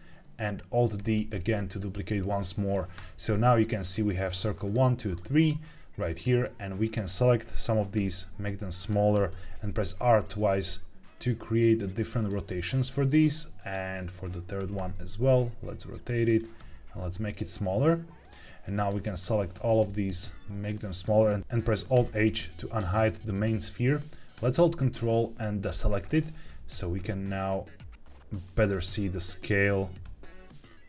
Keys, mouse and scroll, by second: 0.9 alt+d, 1.6 right click, 3.7 click, 4.6 click, 4.9 click, 6.0 click, 7.9 s, 8.7 click, 9.0 r, 9.2 r, 12.1 click, 13.5 click, 14.5 r, 14.7 r, 16.2 click, 16.5 s, 18.1 click, 18.7 shift+click, 19.0 shift+click, 19.5 s, 20.9 click, 21.8 alt+h, 24.5-25.6 ctrl+drag, 26.4 s, 28.4 click, 28.6-29.5 middle drag, 29.9 s.